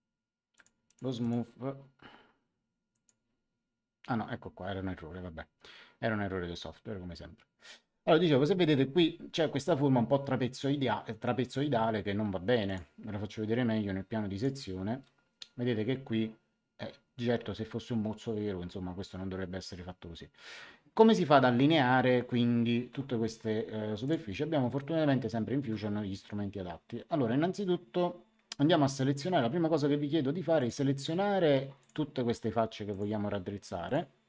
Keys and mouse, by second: 0.5 click, 2.9 click, 12.6 click, 14.3 click, 24.0 click, 30.5 click, 31.7 click, 32.8 ctrl+click.